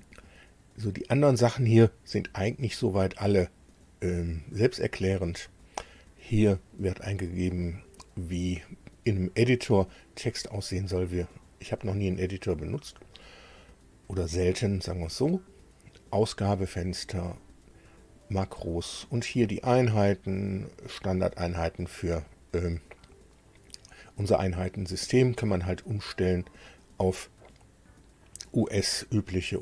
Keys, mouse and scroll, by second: 5.0 click, 13.0 click, 17.3 click, 19.4 click, 26.2 click, 29.4 click.